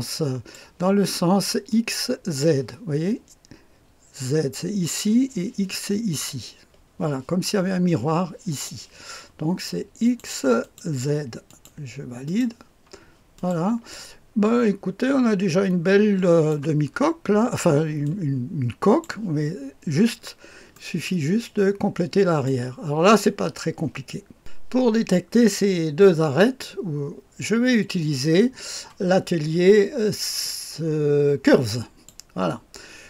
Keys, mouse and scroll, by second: 1.7 click, 10.0 click, 10.6 click, 12.4 click, 13.4-16.5 drag, 16.9-17.4 scroll up 2, 17.4-18.0 scroll down 2, 18.0-19.1 drag, 20.1-21.1 scroll up 2, 20.7-22.5 middle drag, 21.4-22.5 drag, 24.4 Delete, 24.4 click, 30.4-32.1 drag.